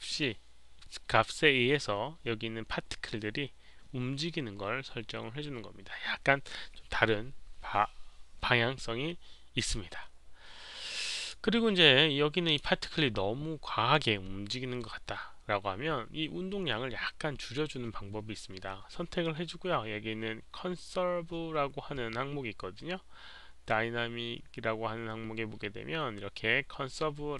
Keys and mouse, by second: 11.1 click, 12.4 click, 21.9 click.